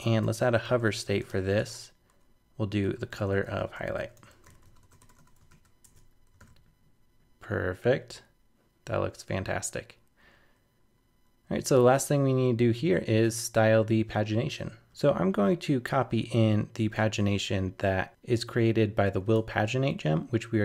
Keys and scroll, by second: 5.5 super+s, 5.8 super+Tab, 6.4 super+r, 17.0 super+Tab.